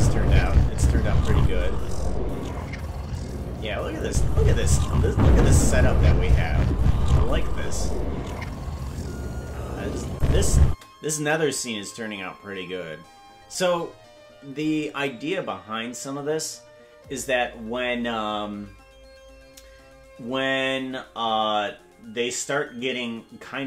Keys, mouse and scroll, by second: 4.1 click, 10.1 click, 10.7 space.